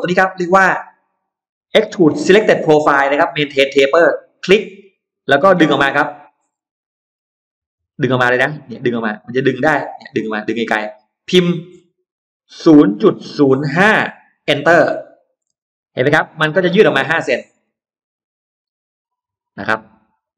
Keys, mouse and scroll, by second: 4.1 click, 5.6 scroll down 2, 6.3 scroll down 2, 6.6 middle click, 6.8-7.2 scroll down 2, 7.7-8.0 scroll down 2, 10.4-10.7 scroll down 1, 12.5 0, 13.2 0, 13.6 5, 15.4 Return, 15.4 space, 15.8-17.3 scroll up 3, 15.9 Escape, 17.4 scroll down 1, 17.8-20.3 middle drag.